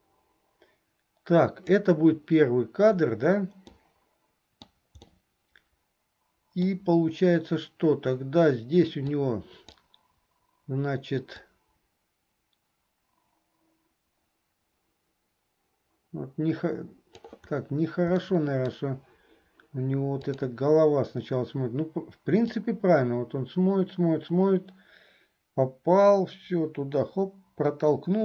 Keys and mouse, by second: 3.8-4.8 middle drag, 5.2-6.9 middle drag, 9.2 click, 11.6-17.5 drag, 18.4 middle click, 20.4 click, 22.7-28.2 drag.